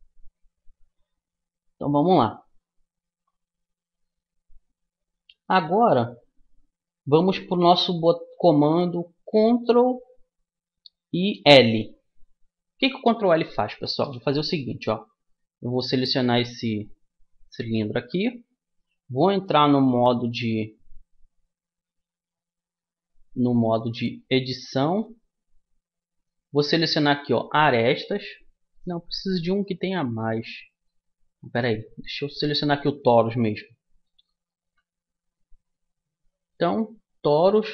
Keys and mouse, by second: 12.0-14.4 middle drag, 16.0-17.8 right drag, 17.8-27.5 middle drag, 25.2 Tab, 31.0 Tab, 32.4-34.2 drag, 34.2-37.7 middle drag.